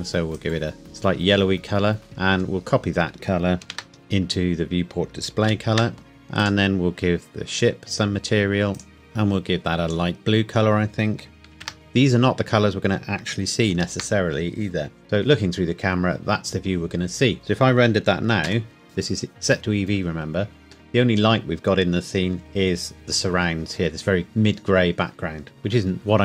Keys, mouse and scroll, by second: 1.6-2.0 scroll down 1, 3.1 scroll up 1, 3.6 ctrl+c, 3.9 click, 4.1-5.1 scroll down 1, 5.5 ctrl+v, 6.1 click, 8.7 click, 11.5 ctrl+c, 11.8-12.1 scroll down 1, 13.7 ctrl+v, 15.0 KP_0, 15.6 scroll up 1, 18.5 F12, 20.3 scroll down 1, 25.5 Escape.